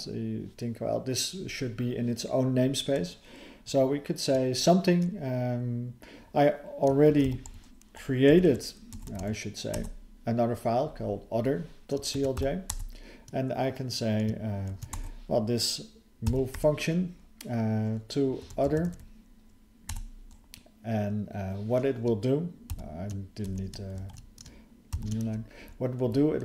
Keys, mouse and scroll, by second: 23.4 BackSpace, 24.0 ctrl+s, 25.6 alt+f, 26.0 alt+f.